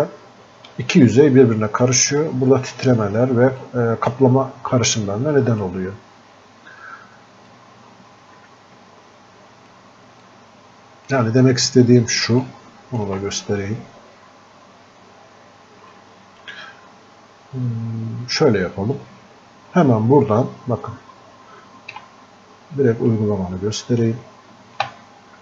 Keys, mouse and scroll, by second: 3.6-5.4 drag, 5.4-10.2 drag, 10.2-12.5 drag, 12.5-15.8 ctrl+shift+drag, 15.9 ctrl+shift+click, 16.0-19.1 alt+drag, 22.0 space.